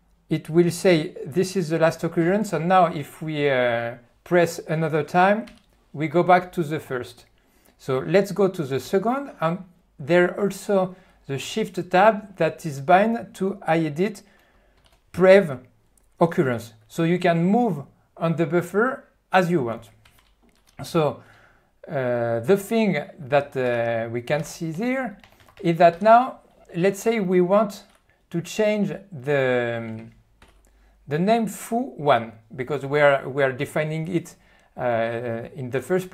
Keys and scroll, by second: 14.8 shift+Tab, 23.7 ctrl+g, 24.8-26.5 typing, 30.4 ctrl+F1.